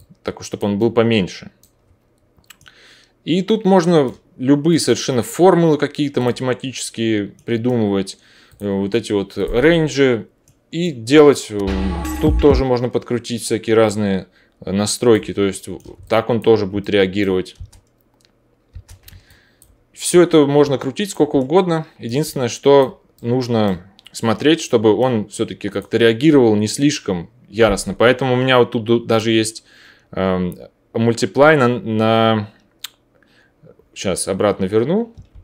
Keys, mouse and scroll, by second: 8.5-13.9 drag, 13.9-19.2 middle drag, 17.5 space, 18.7 space, 19.6-20.8 middle drag, 21.3-23.6 alt+middle drag, 25.7-35.4 drag, 35.3 ctrl+z.